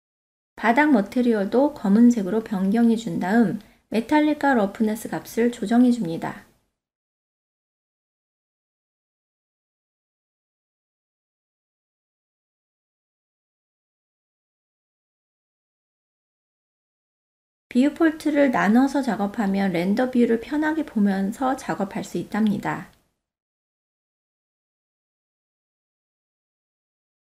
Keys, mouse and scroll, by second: 1.1 click, 6.8 click, 7.3-8.8 drag, 9.8-11.5 drag, 12.2-16.3 drag, 16.8-19.9 drag, 20.9 click, 21.5 KP_0, 23.6 middle click, 24.4 click, 25.5-26.3 ctrl+middle drag.